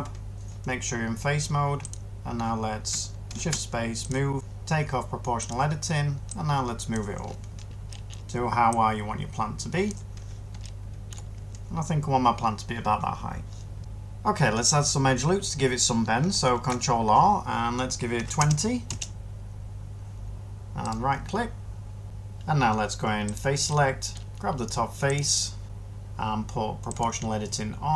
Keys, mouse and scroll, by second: 13.8 ctrl+r, 16.4 ctrl+r, 18.0 typing, 18.8 Return.